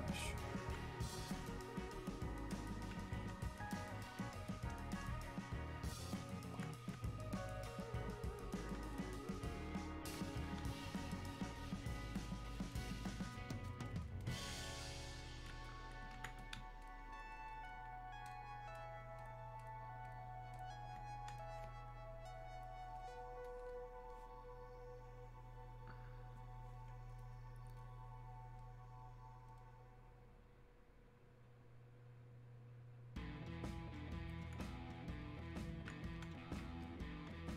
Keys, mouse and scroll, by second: 1.5 click, 6.9 ctrl+click, 27.2 click, 34.6 click.